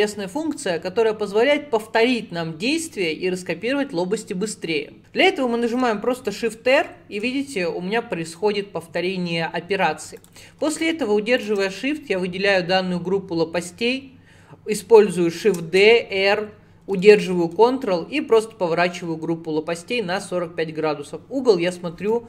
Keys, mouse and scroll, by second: 6.3 shift+r, 6.8 shift+r, 10.2 shift+click, 10.8 shift+click, 11.4 shift+click, 15.5 shift+d.